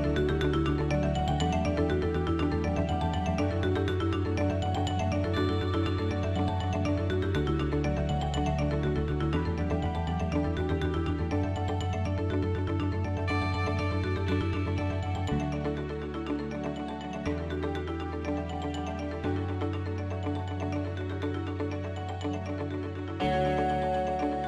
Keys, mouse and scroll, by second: 1.0 Tab, 2.5 a, 3.6 a, 3.8 s, 8.4 click, 8.4 g, 11.7 s, 13.4 g, 19.9 Tab.